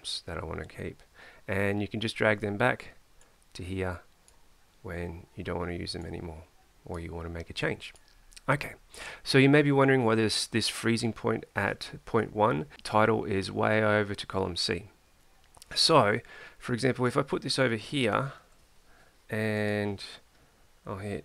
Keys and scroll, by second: 18.4 ctrl+c.